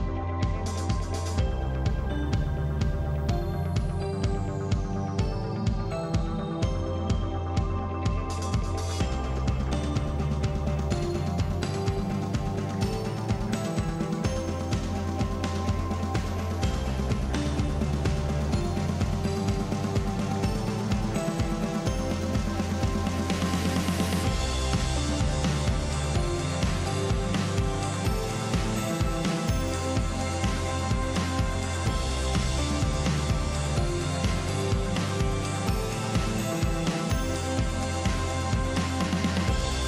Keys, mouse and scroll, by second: 2.0 click, 3.2 shift+click, 4.2 shift+click, 4.9 shift+click, 6.3 shift+click, 7.2 ctrl+l, 10.2 click, 10.7 shift+click, 13.4 shift+click, 16.4 shift+click, 17.5 ctrl+l, 19.3 click, 21.4 shift+click, 23.2 shift+click, 23.9 shift+click, 24.9 ctrl+l, 28.7 click, 29.4 shift+click, 30.2 ctrl+l, 34.7 click, 35.5 click, 36.5 click, 37.4 shift+click, 38.0 shift+click, 39.2 click.